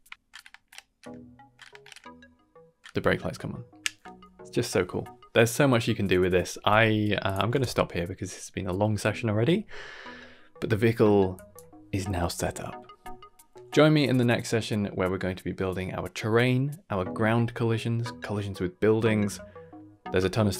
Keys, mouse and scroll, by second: 7.2 click, 7.5 shift+space, 9.1 scroll down 2, 10.2 scroll down 1, 11.3 click.